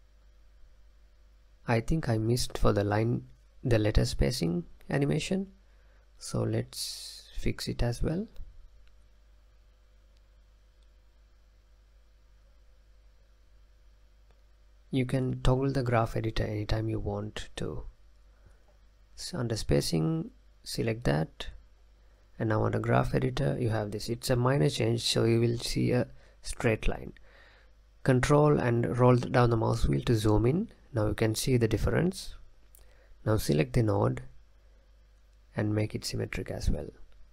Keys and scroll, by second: 0.6 space, 2.5 space, 8.9 space, 10.7 space, 12.5 space.